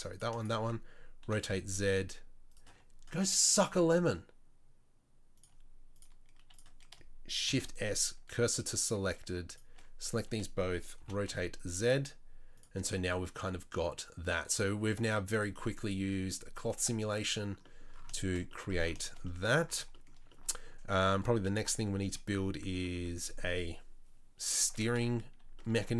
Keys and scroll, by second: 1.3 r, 7.5 shift+s, 11.0 r.